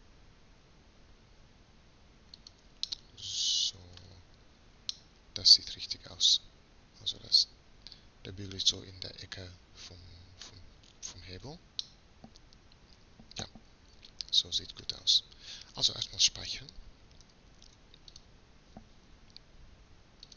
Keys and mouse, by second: 6.8 middle click, 7.0 middle click, 8.6 middle click, 8.8 middle click, 9.0 middle click, 9.2 middle click, 9.7 middle click, 9.9 middle click, 10.9-12.1 middle drag, 12.1-13.8 drag, 17.3 ctrl+s.